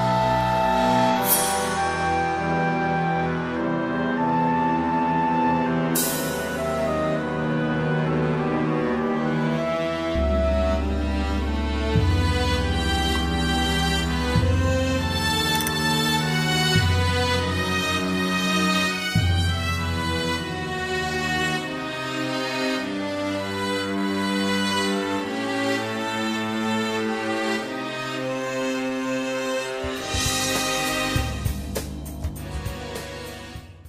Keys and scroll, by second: 12.5 alt+z, 13.4 alt+s, 15.4 alt+s, 16.8 alt+z, 17.7 alt+s, 20.3 alt+s, 22.7 alt+s, 24.3 alt+z, 26.7 ctrl+z, 26.9 ctrl+e, 30.9 ctrl+e.